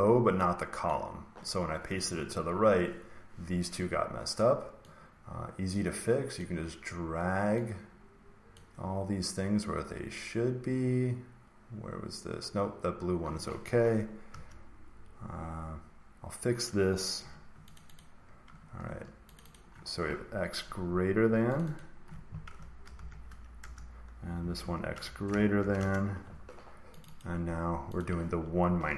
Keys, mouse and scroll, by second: 0.8 click, 6.3 click, 14.2 Return, 17.1 Delete, 17.7 click, 17.9 click, 18.8 Escape, 19.3 click, 19.5 click, 21.5 click, 21.7 click, 22.5-22.9 typing, 23.5 Return, 24.3 F2, 24.5 Right, 24.9-25.5 typing, 25.7 Return, 27.0 click, 27.1 click, 27.9 click, 28.6-28.9 typing.